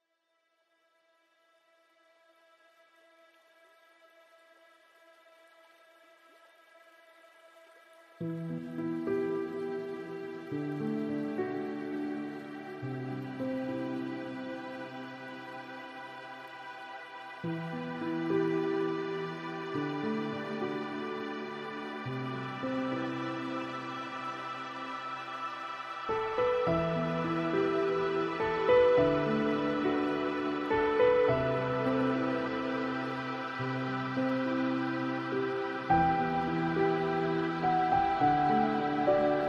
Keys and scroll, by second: 3.4 ctrl+z, 9.5 ctrl+z, 11.8 ctrl+Return, 17.1 shift+F6, 20.9 alt+BackSpace, 22.5 ctrl+d.